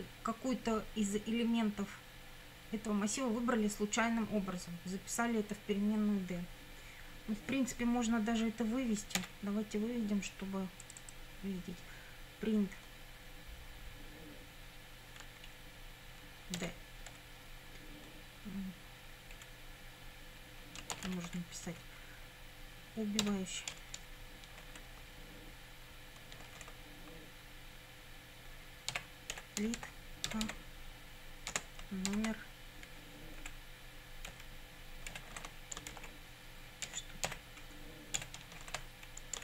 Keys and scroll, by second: 9.2 p, 16.6 d, 19.4 Left, 20.9 shift+', 21.7 Left, 23.2 e, 24.0 BackSpace, 28.7-32.1 typing, 33.4 Right, 34.3-38.2 typing.